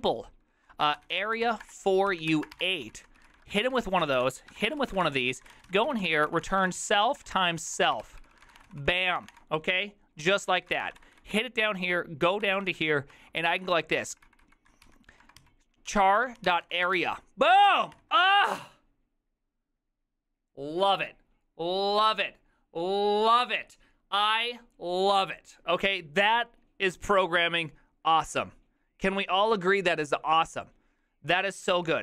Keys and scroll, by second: 0.0-11.2 typing, 11.4 ctrl+d, 13.4-18.0 typing, 31.8 ctrl+c.